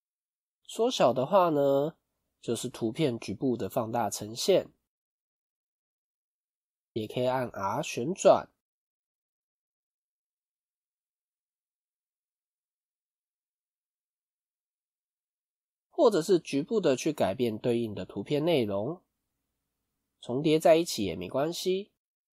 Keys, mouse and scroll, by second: 1.3 middle click, 1.9-2.3 scroll up 3, 2.3 middle click, 3.7 middle click, 5.7-6.0 scroll down 1, 7.6 r, 9.3 middle click, 10.2 middle click, 14.9 click, 16.1 click, 17.5 g, 20.7 click, 21.0 g.